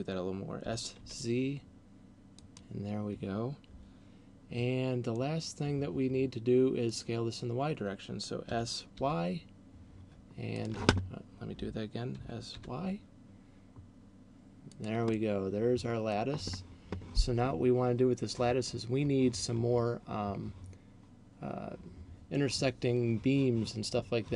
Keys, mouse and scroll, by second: 0.8 s, 2.6 click, 5.3 middle click, 8.8 s, 10.6 click, 12.1 s, 14.8 click, 15.1 middle click.